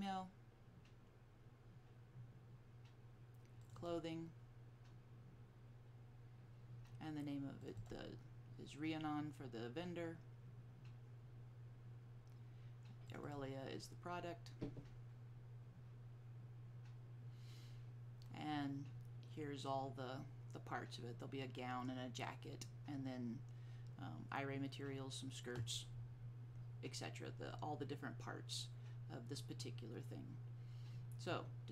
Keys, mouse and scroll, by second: 1.4 click, 3.7-5.8 drag, 7.7-9.8 drag, 13.3-15.1 drag.